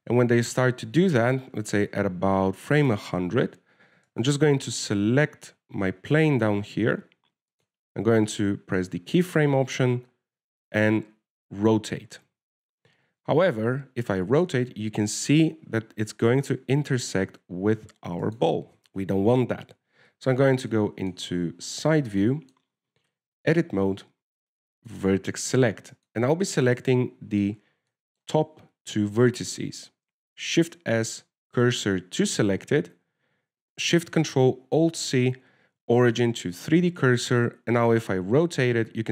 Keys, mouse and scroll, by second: 0.9 alt+a, 2.6 click, 5.4 right click, 8.9 click, 13.2 r, 20.9 KP_3, 21.7 scroll down 4, 22.0 shift+middle click, 22.6-22.9 scroll down 1, 22.9-23.3 scroll up 16, 23.3 scroll down 1, 23.5 shift+middle click, 24.0-24.4 scroll up 2, 24.4 Tab, 26.2 click, 27.2 right click, 27.9 shift+right click, 28.3 middle click, 29.0 scroll down 3, 29.2 shift+middle click, 31.7 shift+s, 36.2 ctrl+alt+shift+c, 38.9 r.